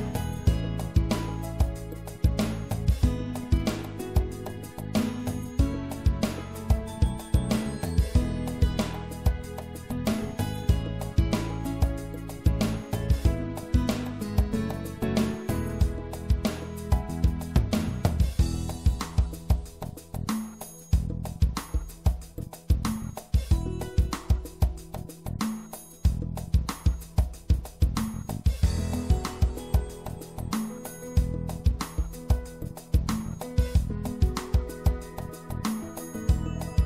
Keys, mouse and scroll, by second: 1.5 ctrl+r, 6.0-8.0 drag, 11.0 click, 14.2 i, 18.6-20.3 middle drag, 20.3 click, 20.9-24.9 right drag, 26.1 click, 29.7-33.7 drag, 32.9 e, 34.9 middle click, 35.1-36.3 drag, 36.4 middle click, 36.5 ctrl+z.